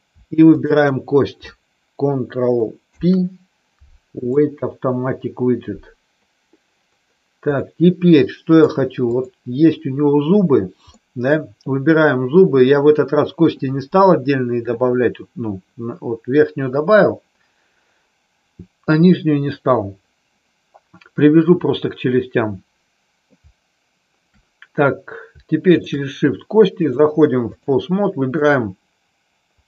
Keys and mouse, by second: 2.8 ctrl+p, 7.6-8.6 middle drag, 10.9 middle click, 25.7 shift+click, 26.8 click, 28.4 click.